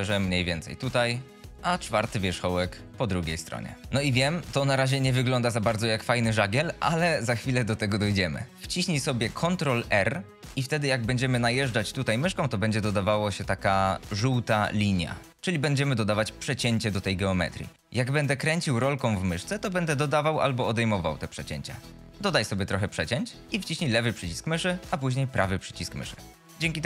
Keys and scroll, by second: 0.2 g, 2.1 g, 10.2 ctrl+r.